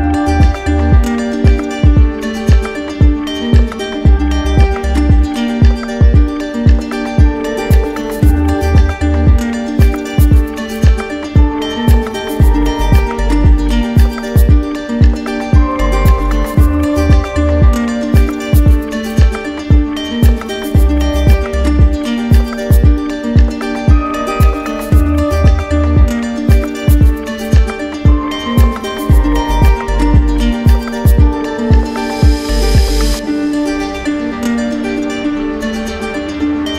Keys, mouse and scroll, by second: 1.7 ctrl+click, 3.6 click, 5.9 click, 7.7 click, 10.4 ctrl+click, 12.4 ctrl+click, 14.3 ctrl+click, 15.5 ctrl+click, 18.7 ctrl+z, 18.7 ctrl+click, 20.6 ctrl+click, 22.9 click, 24.7 click, 26.9 click, 27.7 ctrl+z, 29.2 click, 30.1 alt+click, 32.1 alt+click, 32.8 alt+click, 34.1 click.